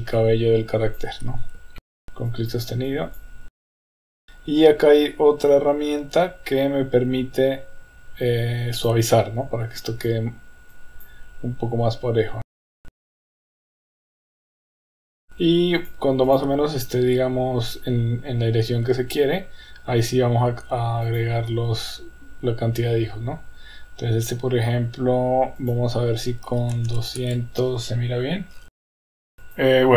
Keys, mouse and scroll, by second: 0.2 click, 1.8 shift+middle click, 1.8 click, 1.9 click, 2.3 drag, 2.9-3.3 drag, 3.5 click, 3.6 click, 3.7 click, 3.9 click, 8.9 click, 9.8-10.2 drag, 10.7-11.2 drag, 12.4 click, 12.7 click, 13.0 click, 13.3 click, 13.4 click, 13.6-15.3 typing, 13.7 click, 14.1 click, 14.5 click, 14.8 click, 15.2 click, 15.9-16.4 drag, 21.1 click, 25.6-27.9 drag, 26.9 KP_0, 28.7 middle click, 28.8 click, 28.9 middle click, 29.0 click, 29.0 KP_0, 29.1 middle click, 29.6 click.